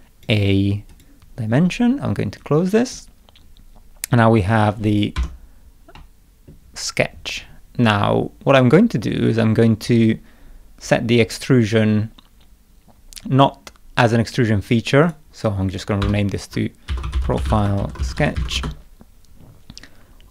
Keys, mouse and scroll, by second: 0.9 click, 2.4 click, 5.2 0, 6.0 middle click, 8.5 click, 12.4 middle click, 15.1 click, 16.0 F2, 16.7-18.9 typing.